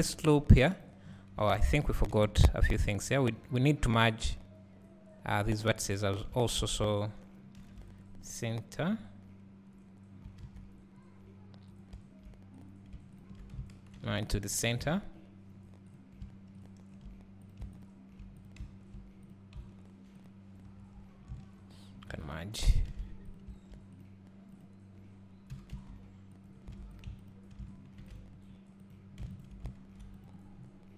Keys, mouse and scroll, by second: 1.6 ctrl+z, 2.7 scroll up 1, 6.1 click, 10.5 alt+a, 11.8 click, 14.9 alt+a, 16.0 click, 16.7 shift+click, 17.5 click, 17.9 shift+click, 18.5 click, 20.3 shift+click, 22.9 alt+a, 23.3 click, 25.6 g, 26.8 alt+a, 27.1 click, 27.3 shift+click, 29.0 click, 30.6 scroll up 1.